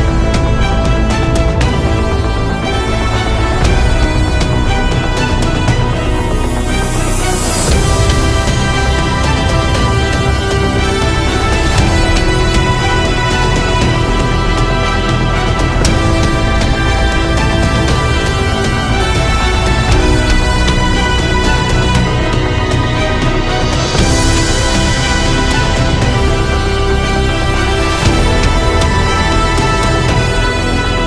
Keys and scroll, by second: 6.1 [, 6.2 [, 6.3 [, 6.3 [, 8.6 ctrl+z, 18.3 ctrl+e, 19.3 ctrl+z, 20.5 ctrl+e.